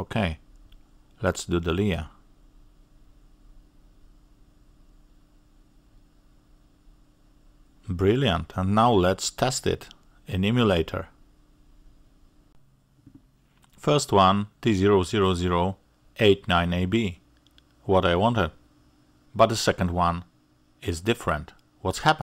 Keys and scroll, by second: 0.0 ctrl+shift+g, 5.3 ctrl+v.